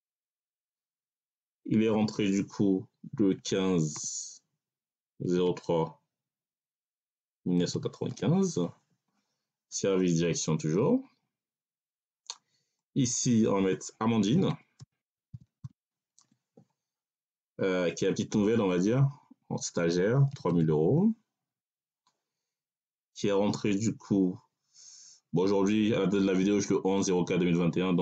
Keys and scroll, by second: 0.1 Tab, 3.2 1, 3.8 5, 5.1 0, 5.3 3, 7.2 1, 7.5 9, 7.9 5, 8.4 Tab, 14.1-15.6 typing, 16.1 Tab, 19.7 3, 20.2 0, 21.5 Tab.